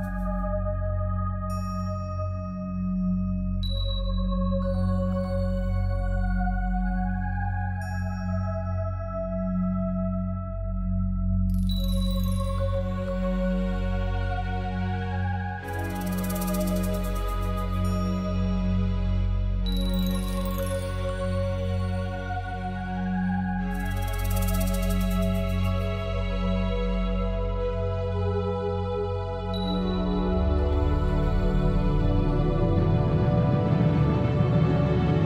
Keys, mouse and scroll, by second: 2.9 right click, 3.6 middle click, 4.8 a, 5.1 middle click, 5.7 middle click, 6.4 KP_1, 7.6 b, 8.3 right click, 8.4 shift+middle click, 8.7 scroll down 1, 9.3 shift+middle click, 10.6 b, 14.3 b, 20.3 click, 22.6 b, 25.1 Delete, 26.2 middle click, 30.7 middle click, 32.3 click, 32.7 middle click, 34.1 click, 34.7 click.